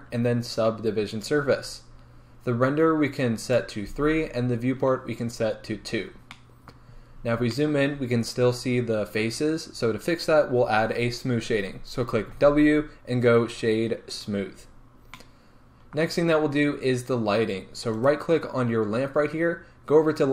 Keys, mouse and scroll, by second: 5.2 click, 6.4-16.4 middle drag, 7.0-7.6 scroll up 2, 12.3 w, 14.7-15.2 scroll down 2, 16.3-18.0 scroll down 2, 18.0 right click.